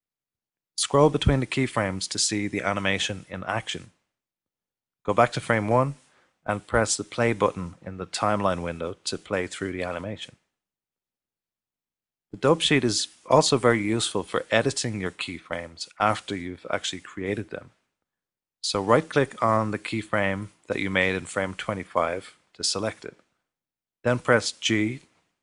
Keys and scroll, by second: 24.2 g.